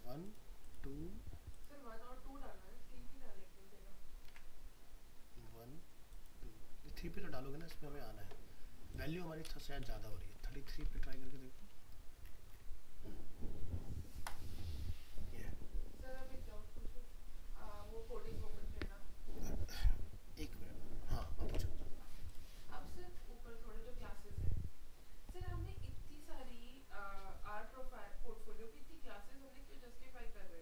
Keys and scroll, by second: 4.3 alt+Tab, 7.6 alt+Tab, 10.5 ctrl+s, 10.9 alt+Tab, 21.5 alt+Tab.